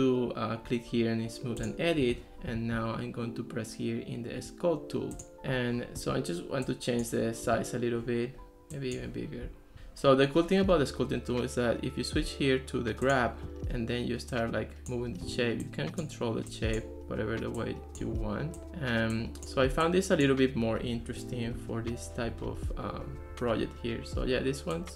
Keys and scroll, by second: 9.7 super+z.